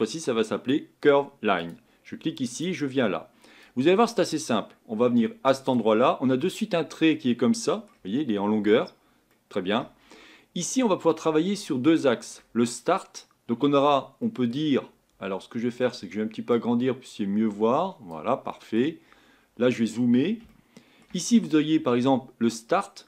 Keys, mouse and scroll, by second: 5.7 click, 6.4-10.0 middle drag, 10.0-11.2 scroll up 3, 14.2-16.6 middle drag, 16.6-18.5 drag, 18.5 middle click, 19.1 scroll up 4, 20.5-23.0 shift+middle drag.